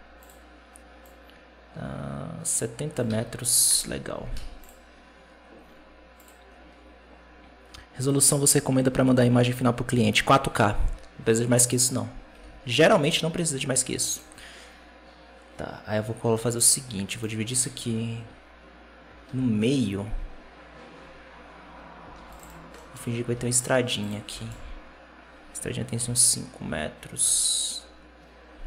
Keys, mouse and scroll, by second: 0.1-0.9 drag, 2.9 x, 3.6 KP_0, 4.2 z, 6.0-9.2 drag, 11.6 right click, 12.2 g, 16.2 middle drag, 16.5-17.0 scroll down 6, 17.0 right click, 17.4 Tab, 19.2 ctrl+r, 22.0 ctrl+r, 22.6 middle click, 23.1 ctrl+r, 24.1 g.